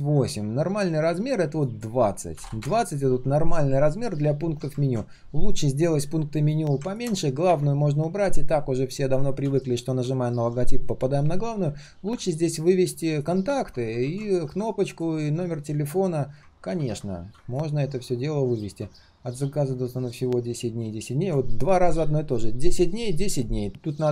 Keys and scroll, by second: 4.7 ctrl+z, 14.0 ctrl+z, 16.5 ctrl+z, 16.7 ctrl+z.